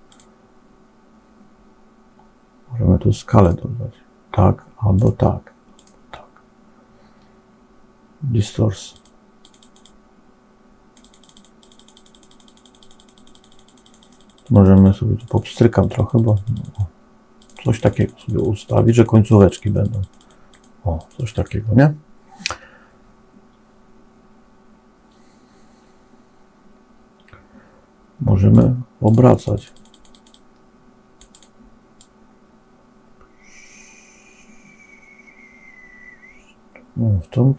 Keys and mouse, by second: 0.0 click, 3.3 click, 4.9 click, 5.7 click, 9.5 click, 9.8-10.9 drag, 10.9 click, 11.3 click, 11.6 click, 11.7 click, 12.0 click, 12.4 click, 12.6 click, 12.9 click, 13.8 click, 13.9 click, 14.3 click, 14.7 click, 16.1 click, 16.3 click, 16.7 click, 17.3 click, 17.4 click, 17.7 click, 17.8 click, 18.5 click, 18.9 click, 19.1 click, 19.2 click, 19.6 click, 19.8 click, 19.9 click, 20.4 click, 21.1 click, 28.9 click, 29.3 click, 29.5 click, 29.7 click, 30.1-31.1 drag, 31.2 click, 31.8-37.5 drag.